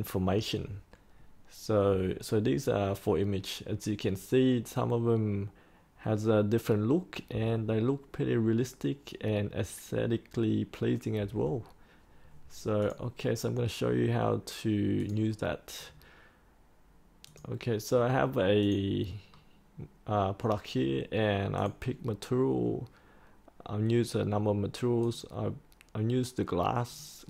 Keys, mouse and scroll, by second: 12.7 click, 19.2 scroll down 1, 20.0-20.4 scroll up 1, 21.5 click.